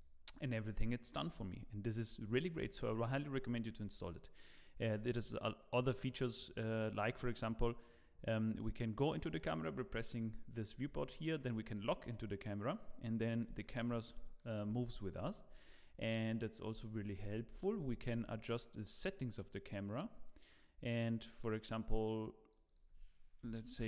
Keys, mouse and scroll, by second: 0.2 click, 1.1 middle click, 1.6-2.1 scroll up 2, 2.2 shift+middle click, 3.8 middle click, 8.5 click, 11.6 click, 12.1 middle click, 12.6-13.2 scroll down 2, 13.2 middle click, 13.6 shift+middle click, 14.6-15.0 scroll up 2, 15.0 shift+middle click, 15.2-15.7 scroll down 2, 15.7 middle click, 16.8 shift+middle click, 17.2 scroll up 1, 17.6 shift+middle click, 19.5 click, 22.6 click.